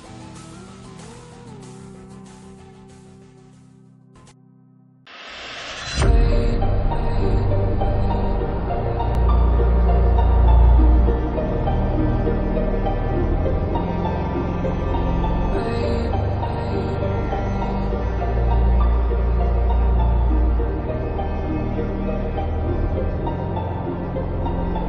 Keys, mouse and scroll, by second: 1.8 click, 3.0 space, 3.1 click, 3.2-4.0 space.